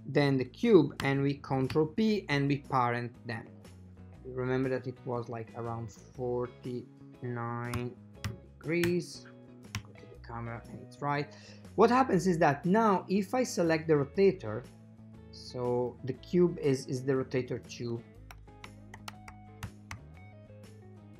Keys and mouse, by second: 1.8 ctrl+p, 4.9 click, 6.0 click, 9.9 KP_0, 13.6 click, 15.4 click, 15.9 click, 17.4 click, 17.7-21.1 drag.